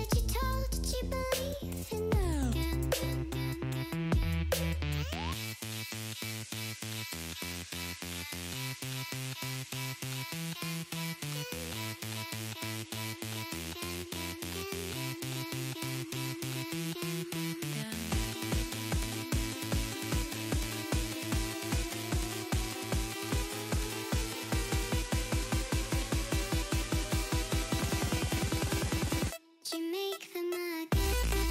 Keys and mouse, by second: 0.2 ctrl+[, 0.3 ctrl+[, 1.4 ctrl+[, 2.3 ctrl+[, 5.2 ctrl+[, 6.1 ctrl+[, 7.0 ctrl+[, 8.2 ctrl+], 9.6 ctrl+[, 12.9 click, 14.9 click, 15.5 Down, 15.9 Down, 20.5 click, 23.1 click, 27.4 Return, 28.0 click, 29.6 Down, 30.6 Down.